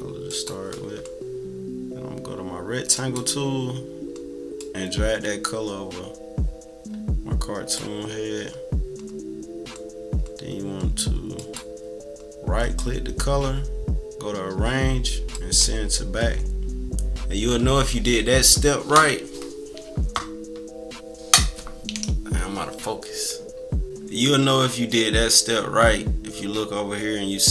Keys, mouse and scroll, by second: 0.3 click, 2.9 click, 4.6-7.7 drag, 11.3 click, 12.6 click, 15.3-16.4 drag.